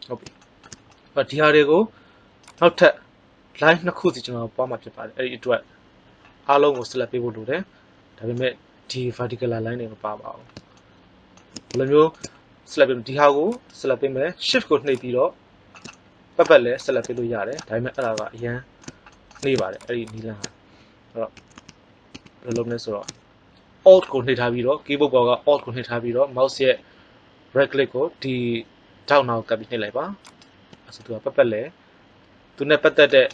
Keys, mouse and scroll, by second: 10.3 middle click, 15.8-17.0 middle drag, 21.3 a, 21.5 a, 22.0 a, 30.1 right click, 31.0-32.4 middle drag.